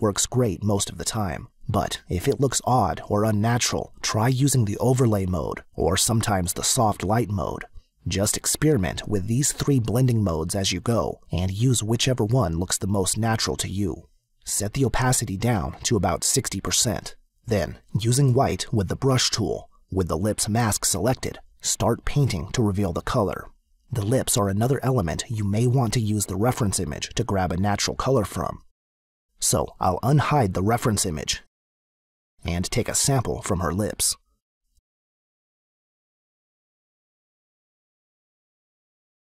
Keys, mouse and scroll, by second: 8.1 click, 21.2 click, 29.7 space, 29.8 click, 30.7 click, 31.7 space, 31.8 click, 33.7 click, 35.1 click, 35.8 click, 37.2 click.